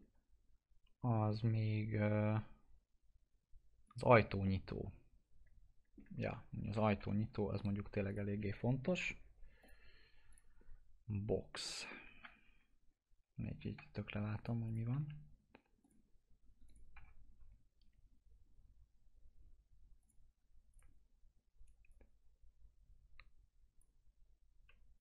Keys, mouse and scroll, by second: 3.8 click, 4.4-6.7 alt+middle drag, 6.7 f, 8.0 click, 11.4 scroll up 1, 12.2 F3, 12.5 scroll up 1, 12.8-13.1 scroll down 1, 13.7 F3, 14.3 right click, 14.6 click, 14.9 alt+x, 15.7 click, 16.9 F4, 19.9-24.9 drag.